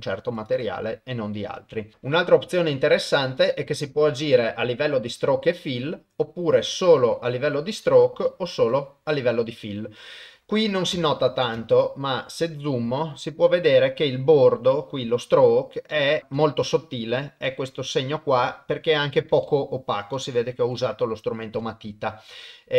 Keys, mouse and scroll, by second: 0.4 click, 3.4-6.8 drag, 8.1-8.7 drag, 11.0 space, 15.9 middle click, 16.2 KP_0, 16.5 shift+middle click, 17.5 shift+click, 17.5 shift+middle click, 17.6 shift+click, 17.7 shift+middle click, 18.5 shift+click, 19.4 shift+middle click, 19.5 shift+click, 19.6 shift+middle click, 20.2 shift+middle click.